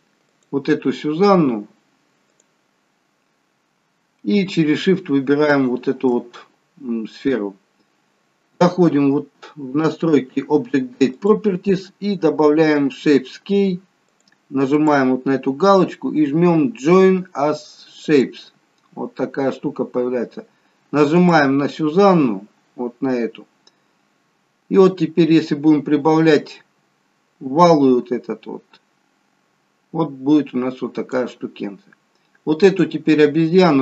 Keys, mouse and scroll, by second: 0.3 click, 2.3 click, 5.5 shift+click, 11.2 click, 14.1 click, 14.8 click, 21.2 click, 24.8 click, 32.6 click.